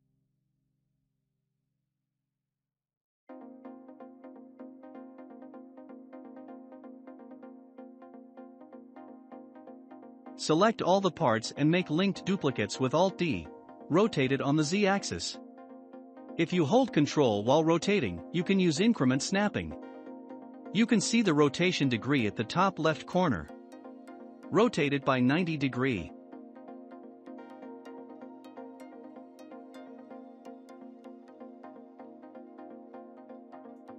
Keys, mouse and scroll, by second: 1.0-2.0 shift+middle drag, 2.0 click, 5.3 click, 5.8-6.3 scroll down 8, 6.6-8.7 shift+middle drag, 8.6-9.2 scroll up 5, 9.4-11.1 drag, 11.1-11.6 scroll down 4, 11.6-12.6 shift+middle drag, 12.6 alt+d, 14.7-16.7 middle drag, 16.7 r, 22.8-23.4 scroll down 2, 23.4-26.6 middle drag, 25.1 scroll up 1, 26.6-29.6 drag, 29.6-30.8 shift+middle drag, 30.8-31.8 drag, 31.8-33.3 shift+middle drag, 33.3-33.9 scroll up 1.